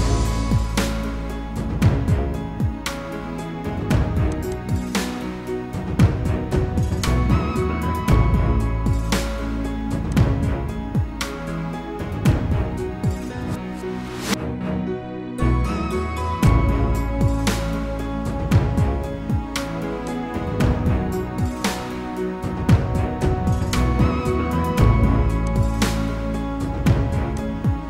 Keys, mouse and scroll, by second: 4.4 double click, 5.5-8.9 typing, 26.7 typing.